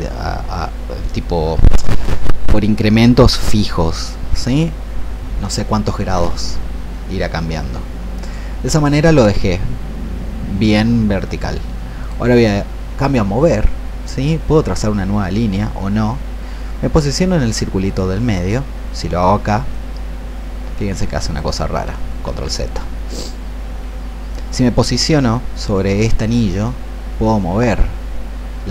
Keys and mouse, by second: 12.0-21.7 drag, 22.1 ctrl+z, 26.6-28.7 drag.